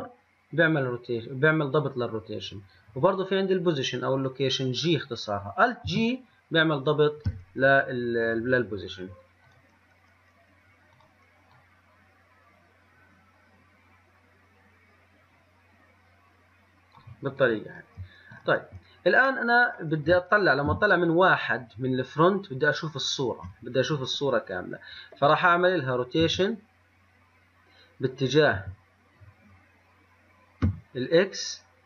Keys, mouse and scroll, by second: 5.9 alt+g, 8.3 click, 9.6-11.2 drag, 17.5 click, 17.8 click, 18.5 click, 20.8 KP_1, 26.3 r.